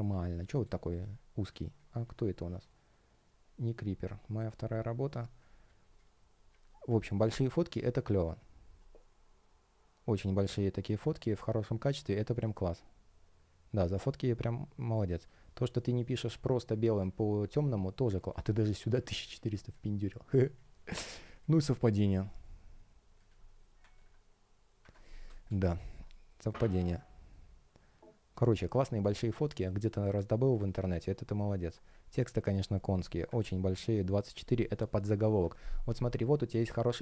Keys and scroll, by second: 4.4 space, 23.9 super+\, 25.2 space, 35.4 super+\.